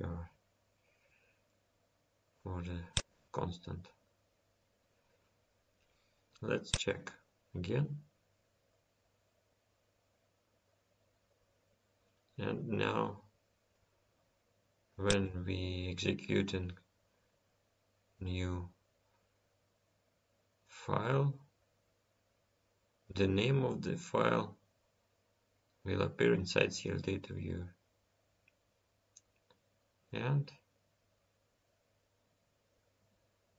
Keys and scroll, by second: 16.4 F10, 21.9 F10.